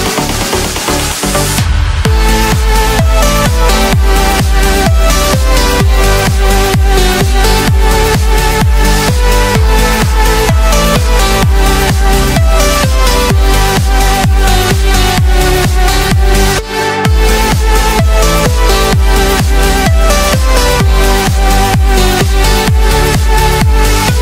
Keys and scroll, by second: 16.9 ctrl+shift+a.